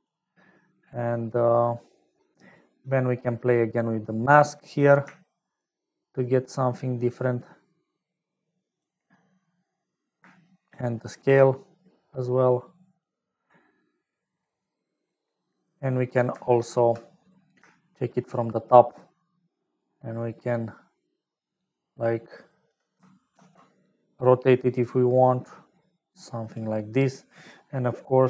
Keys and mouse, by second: 4.4 middle click, 5.6-8.9 shift+drag, 10.7-13.6 shift+drag, 14.7 middle click, 17.8 shift+middle click, 19.8-22.7 shift+drag, 23.8 ctrl+z, 24.9-26.6 drag.